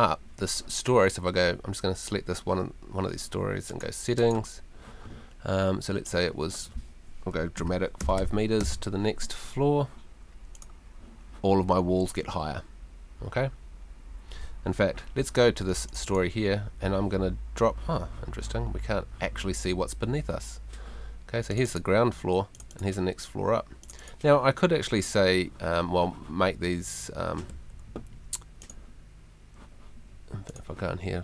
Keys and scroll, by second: 7.6 5, 8.0 0, 27.5 Escape.